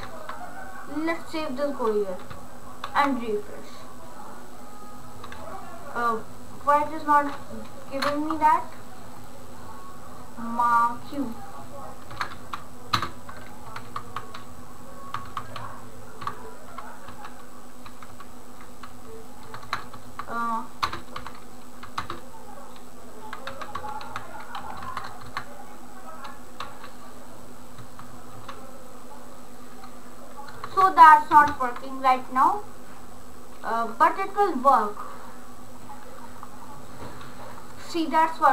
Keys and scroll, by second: 12.3 BackSpace, 13.2 ctrl+space, 13.8 Delete, 14.1 Delete, 15.0 Delete, 15.3 Delete, 15.5 Delete, 16.3 Delete, 17.2-21.2 typing, 22.2 ctrl+space, 23.6 e, 24.2 f, 24.9 BackSpace, 26.6 r, 27.8 BackSpace, 28.3 r, 30.6 BackSpace, 31.3 ctrl+s.